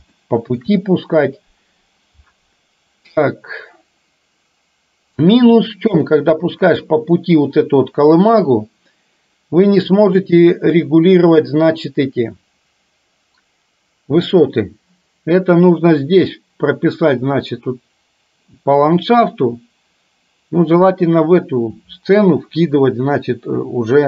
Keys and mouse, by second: 0.2-0.7 shift+middle drag, 6.1-6.7 shift+middle drag.